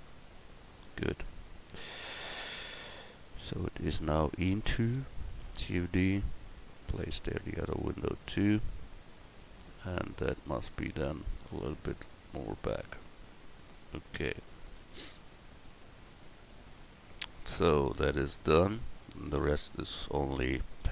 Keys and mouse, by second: 1.0 Tab, 1.6-2.4 right drag, 5.4 shift+d, 6.2-8.6 drag, 9.9-10.6 drag, 14.6 a.